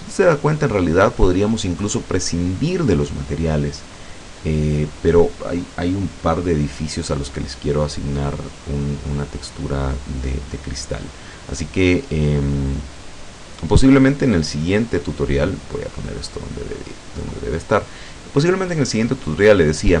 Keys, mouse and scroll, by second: 13.4-17.5 drag.